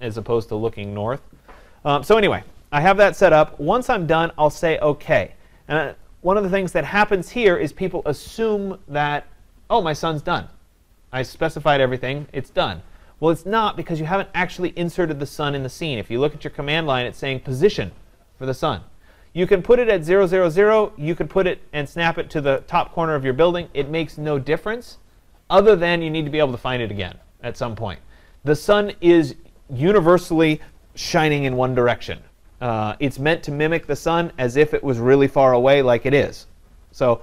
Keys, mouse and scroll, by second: 6.3 click, 22.6 click, 25.2-27.7 drag.